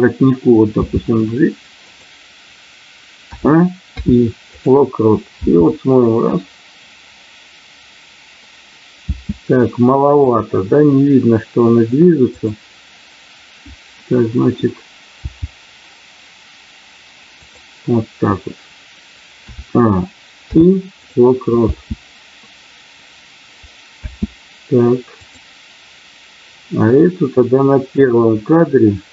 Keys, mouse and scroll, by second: 0.8 g, 3.3 a, 3.8 i, 5.3 space, 9.1 space, 10.2 click, 12.3 click, 15.2 g, 17.3 click, 20.4 i, 21.5 space, 25.2 click, 25.2 space, 28.0 click.